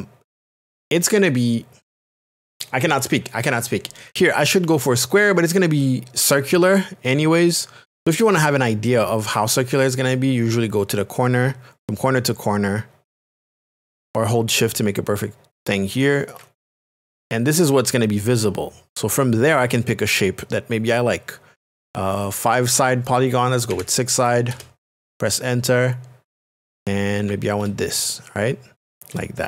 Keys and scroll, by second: 4.1 ctrl+z, 23.7 KP_6, 24.5 Return, 27.6 shift+space, 29.1 space.